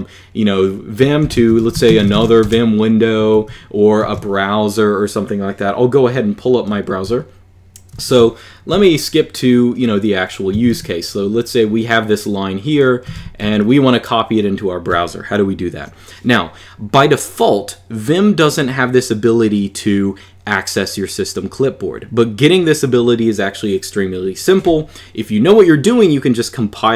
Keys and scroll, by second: 1.0 super+Return, 1.0-2.5 typing, 3.1 super+q, 7.7 super+@, 8.5 n, 10.1-11.0 typing, 12.6-13.7 typing.